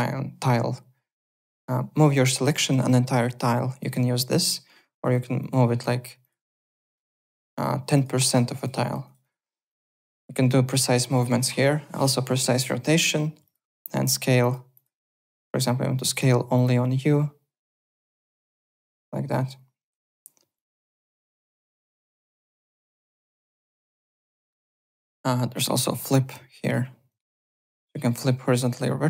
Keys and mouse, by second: 1.4 alt+middle click, 1.9 click, 2.5 ctrl+z, 3.8 click, 4.3 click, 5.1 click, 7.5 click, 8.5 click, 13.4 click, 14.4 click, 16.1 click, 17.8 click, 19.5 ctrl+z, 20.1 w, 20.5 click, 21.1 r, 21.2 click, 21.8 w, 22.1 click, 22.7 alt+Tab, 23.1 alt+click, 23.8 alt+Tab, 24.4 alt+middle click, 24.8 w, 26.6 click, 28.1 alt+middle click.